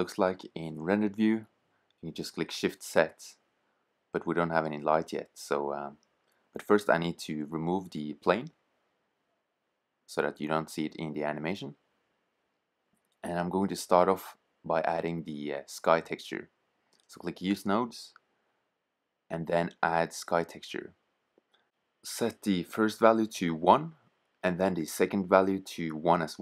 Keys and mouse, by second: 1.8 shift+z, 3.9 shift+z, 10.1-14.4 middle drag, 16.0 click, 16.4-23.0 drag, 25.2-26.4 drag.